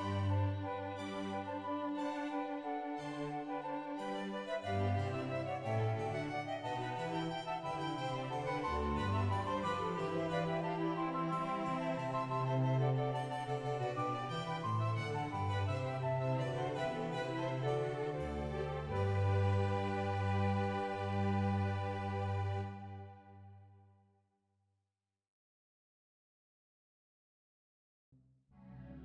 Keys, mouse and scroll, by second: 0.0 middle click, 0.0 right click, 0.2 ctrl+right click, 0.7-1.6 scroll down 5, 0.7 a, 2.4 shift+middle click, 2.4-4.5 scroll up 2, 4.5-5.9 drag, 4.5 shift+middle click, 4.5-5.1 scroll down 2, 5.1 g, 5.1 y, 5.2 right click, 5.9 shift+g, 6.9 shift+click, 6.9 right click, 8.7 right click, 8.7 g, 10.0 shift+click, 10.0-10.7 scroll down 1, 10.7 click, 10.7 shift+middle click, 12.5 shift+middle click, 14.0 ctrl+right click, 14.0 scroll up 1, 14.2 shift+middle click, 15.0 click, 15.0 g, 18.0 click, 18.0 g, 19.5 scroll down 2, 19.8 click, 19.8 right click, 19.8 shift+middle click, 19.8 scroll up 2, 19.8 2, 20.3 g, 20.3 o, 20.9 click, 21.2 scroll down 2, 21.3 shift+middle click, 21.3-21.7 scroll down 1, 21.7 o, 22.6 right click, 22.6 click, 22.6 g, 23.4 right click, 24.7 g, 24.8 shift+middle click, 24.8 right click, 26.0 g, 26.1 right click, 26.8 click, 28.5 scroll down 1, 28.7 right click.